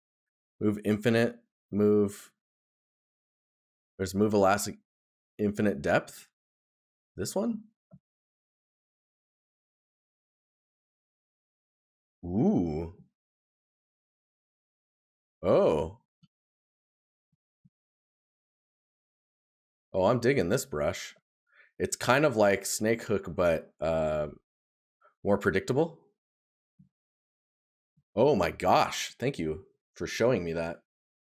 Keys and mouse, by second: 2.4 right click, 12.6 right click, 24.1 right click, 26.4 right click, 30.3 right click.